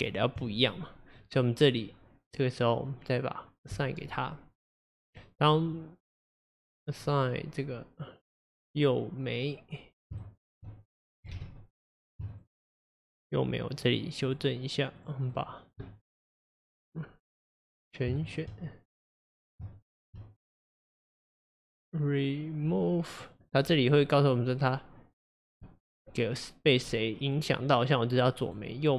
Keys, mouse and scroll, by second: 2.3 click, 3.8-4.9 drag, 4.9-7.9 middle drag, 10.3 shift+click, 11.4 ctrl+z, 11.8 click, 12.4 shift+click, 13.0 shift+click, 13.3 shift+click, 13.9 shift+click, 14.3 shift+click, 15.0 shift+click, 15.4 shift+click, 17.6-18.2 scroll up 1, 18.2 shift+click, 19.1-19.9 drag, 22.7-23.3 scroll up 1, 23.3 click, 25.7-28.9 drag.